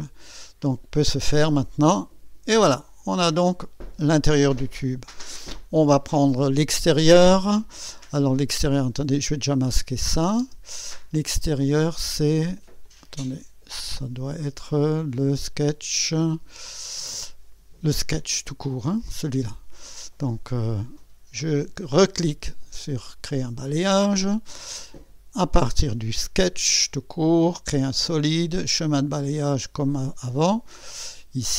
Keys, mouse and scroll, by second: 1.8 click, 10.0 click, 10.4 space, 12.2 click, 12.9-14.2 drag, 14.3 scroll up 1, 14.8 right click, 17.3 click, 18.2 scroll up 1, 19.0-19.7 scroll down 2, 20.2 click, 22.7 click, 25.3 click, 26.4 click, 27.8 click, 28.9 click, 30.9 click.